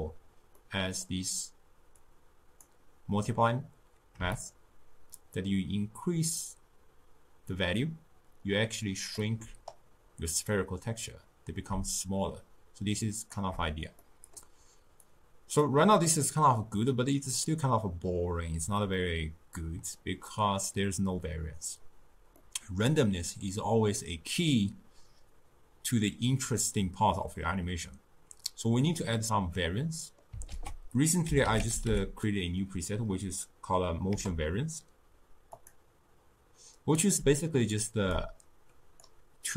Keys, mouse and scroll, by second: 0.6-2.0 middle drag, 2.0-7.5 drag, 12.0-14.1 shift+drag, 14.1-15.1 middle drag, 15.1-16.1 drag, 16.1-19.3 middle drag, 20.3-25.5 middle drag, 29.9-30.6 middle drag, 30.6 ctrl+a, 38.2-39.5 drag.